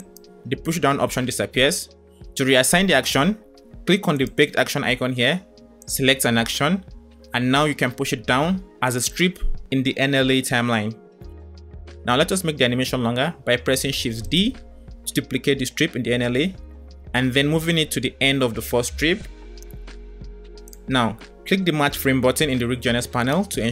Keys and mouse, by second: 4.3-6.1 drag, 9.0 click, 9.3 space, 10.4 click, 14.3 shift+d, 23.3 click.